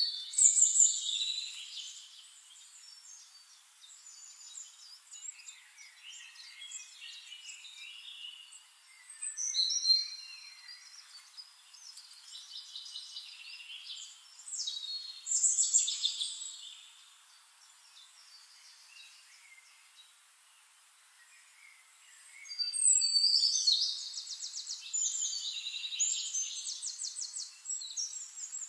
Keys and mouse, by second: 2.0 click, 5.8-9.3 drag, 9.7-14.1 shift+drag, 14.4-16.8 drag, 19.2 click, 20.4-22.6 right drag, 22.7-28.3 middle drag, 24.2-28.3 drag, 24.2-28.3 right drag, 28.5 click.